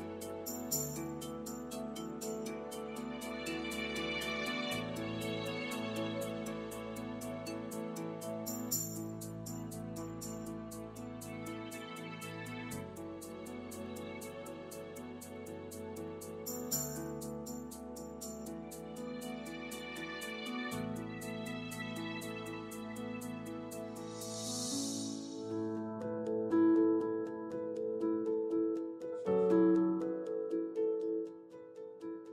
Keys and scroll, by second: 15.8 3, 16.2 Return, 20.5 ., 21.1 5, 22.2 Return.